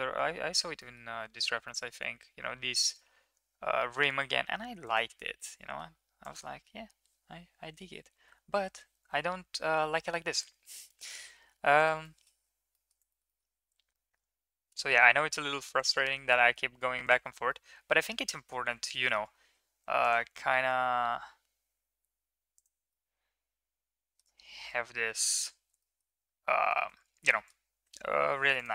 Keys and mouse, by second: 5.4-5.8 middle drag, 6.2 click, 8.9 ctrl+z, 9.4 ctrl+z, 9.5 ctrl+z, 9.6 ctrl+z, 9.9-10.5 ctrl+z, 12.0 middle drag, 12.7 middle click, 13.1 middle click, 13.3 middle click, 16.2 shift+middle click, 16.4 middle click, 17.0 ctrl+click, 17.4-18.5 middle drag, 18.9 shift+middle drag, 19.1 middle click, 19.7 ctrl+r, 23.0-24.2 middle drag, 24.9 3, 25.7 shift+middle click, 27.3 shift+middle click, 28.5 ctrl+click.